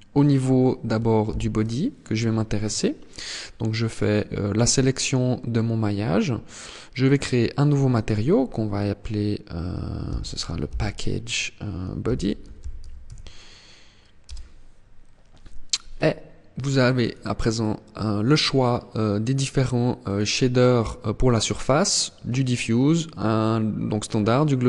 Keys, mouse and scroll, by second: 0.9 ctrl+l, 6.6 click, 7.6 click, 16.6 click, 19.7 click.